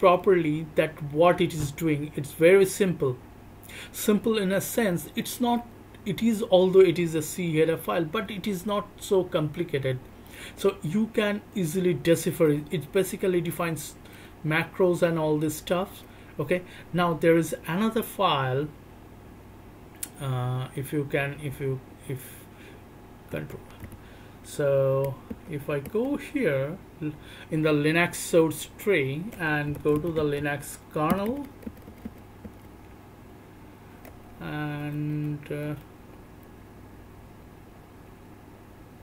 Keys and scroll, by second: 23.5 ctrl+f, 25.4 BackSpace, 35.9 Down, 36.1 Down, 36.3-37.0 Down, 37.5 Down, 37.7 Down, 37.8 Down.